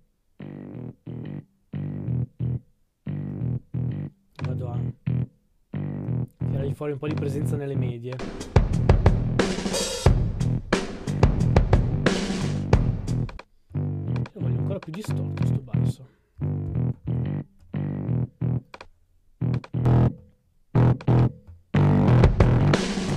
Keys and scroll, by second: 16.1-19.2 typing.